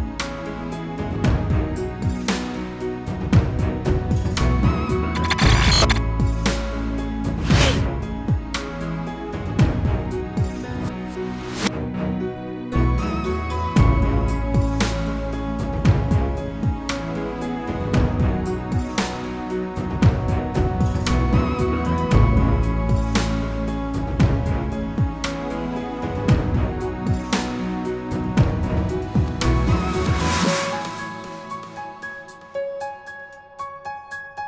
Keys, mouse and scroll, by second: 0.3 click, 3.2 click, 4.5 F2, 6.4 F4, 7.8 click, 8.1 double click, 8.4 F9, 10.7 click, 13.6 click, 13.9 double click, 15.2 click, 16.8 double click, 18.0 click, 18.3 double click, 20.4 click, 20.7 double click, 21.5 click, 22.0 scroll down 1, 22.4 scroll up 1, 23.9-24.8 scroll down 1, 25.5 scroll down 1, 25.9 scroll up 1, 27.3 F4, 27.9 click, 31.5 click, 33.5 click, 33.5 double click.